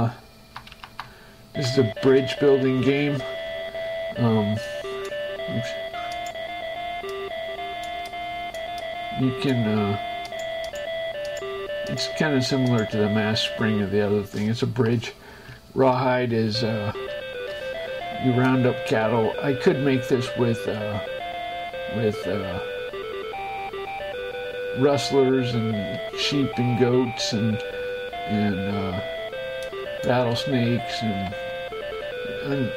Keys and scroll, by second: 0.2 Up, 1.3 Right, 2.3 space, 14.4 shift+Escape, 15.7 Right, 16.5 space.